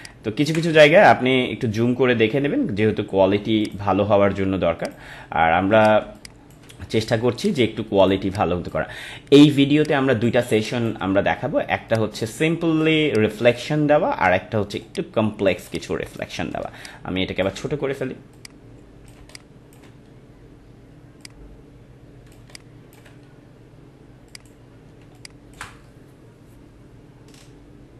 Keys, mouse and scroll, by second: 0.0-3.0 ctrl+drag, 3.6 click, 6.0 space, 6.1 click, 6.8 space, 7.4 click, 8.2 space, 8.3 click, 8.6 space, 9.8 click, 10.4 space, 10.5 click, 10.9 space, 11.8 click, 12.9 space, 13.0 click, 13.6 space, 14.8 click, 15.6 space, 15.7 click, 16.8-19.2 ctrl+drag, 19.2 space, 19.3 click, 21.2 click, 22.4 space, 22.5 click, 22.6 click, 22.9 space, 24.2 click, 25.0 space, 25.1 click, 25.5 space.